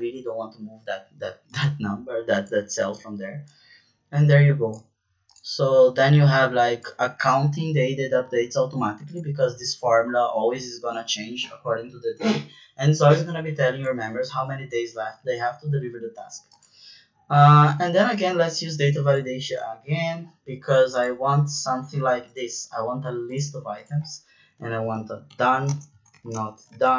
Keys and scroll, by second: 24.5-26.9 typing.